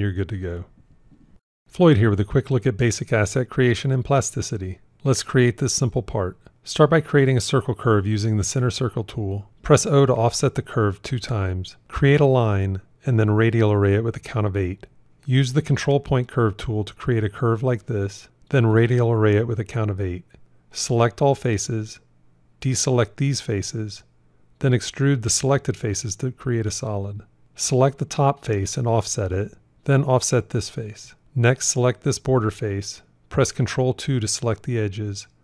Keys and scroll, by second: 6.8 shift+c, 9.5 o, 12.6 shift+a, 28.6 o, 34.0 ctrl+2.